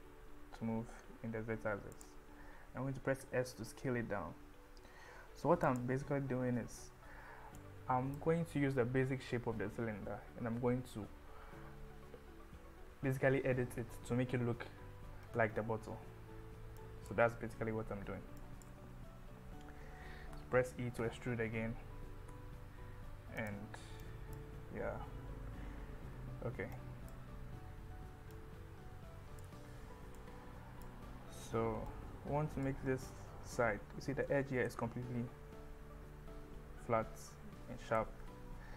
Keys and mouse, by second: 0.0 z, 2.0 click, 3.2 s, 5.7 click, 7.6 click, 16.8 click, 18.4 click, 20.4 e, 21.0 z, 22.3 z, 23.4 click, 24.1 click, 26.8 click, 28.4-29.4 drag, 30.3 click, 31.9 click, 34.7-38.0 middle drag, 38.2 KP_1.